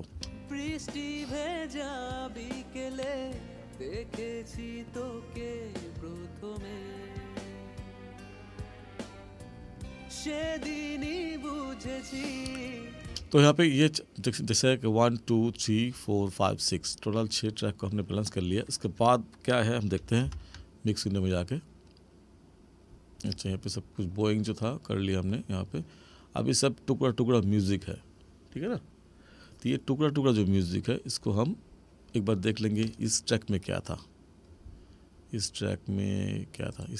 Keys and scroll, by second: 0.1 space, 13.1 space, 20.2 ctrl+=.